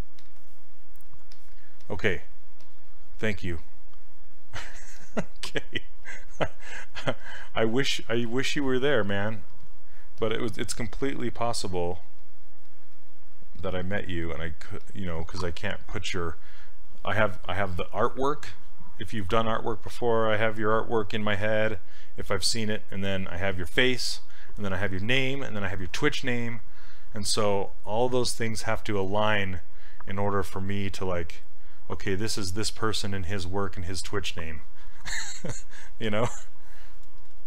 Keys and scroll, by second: 10.8 s.